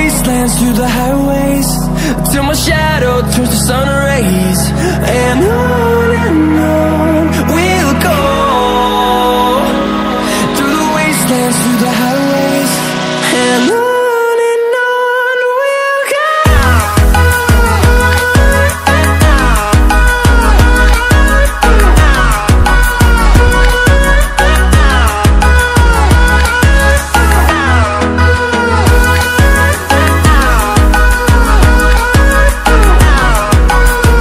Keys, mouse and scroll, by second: 8.2 click, 9.2 shift+click, 11.4 shift+click, 13.1 Escape, 14.6 click, 22.6 click, 25.1 ctrl+alt+scroll down 1, 26.5 click, 27.1-27.5 ctrl+alt+scroll down 1, 27.5 ctrl+alt+scroll up 1, 29.4 ctrl+alt+scroll down 1, 29.8 ctrl+alt+scroll up 1, 31.0 click, 34.0 ctrl+alt+scroll up 1.